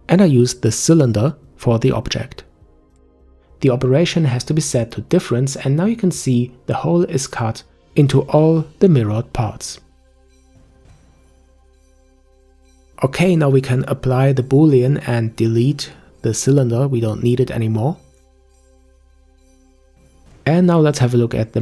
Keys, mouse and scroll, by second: 1.8-4.9 drag, 6.4-6.9 scroll down 1, 6.9-7.9 middle drag, 7.9-10.2 scroll down 1, 10.2-13.4 scroll up 3, 14.2 click, 15.5 scroll down 1, 18.3 click, 19.6 Delete, 20.6-21.3 scroll down 3, 21.3-21.6 shift+middle drag.